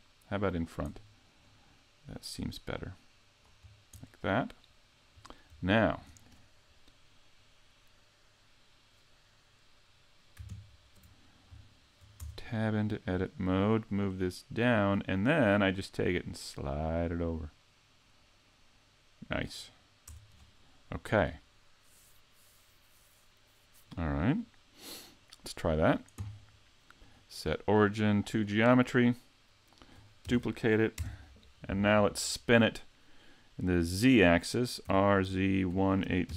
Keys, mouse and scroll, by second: 1.4 click, 3.6-4.0 scroll down 1, 4.0 middle click, 5.2-5.7 scroll down 1, 5.7 shift+middle click, 10.5 ctrl+KP_3, 11.7 shift+middle click, 12.2 Tab, 13.2 click, 16.1 click, 20.1 Tab, 25.7 click, 27.0 click, 30.4 shift+d, 34.8 r.